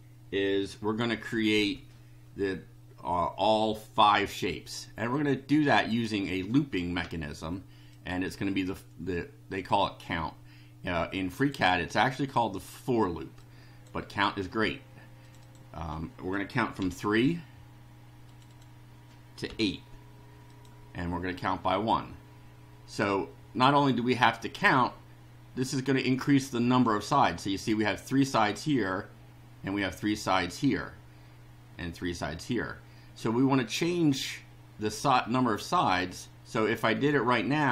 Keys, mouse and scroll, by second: 5.1-6.0 drag, 7.9 click, 9.8-11.6 drag, 13.4 click, 15.2 click, 16.8 KP_3, 18.2 click, 19.4 KP_8, 20.5 click.